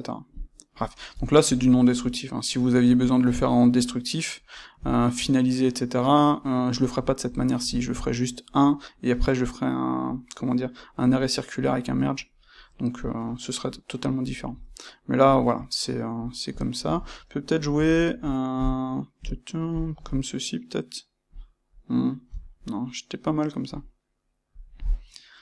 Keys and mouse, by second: 0.3 click, 0.9-16.1 ctrl+middle drag, 16.1 click, 16.5-19.7 ctrl+middle drag, 19.7 click, 19.8-24.5 middle drag, 24.5 click, 25.3 click.